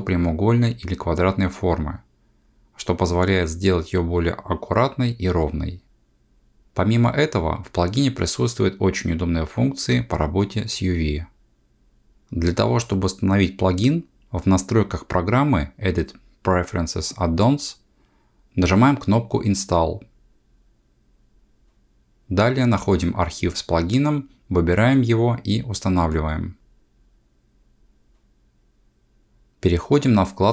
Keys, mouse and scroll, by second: 15.7 click.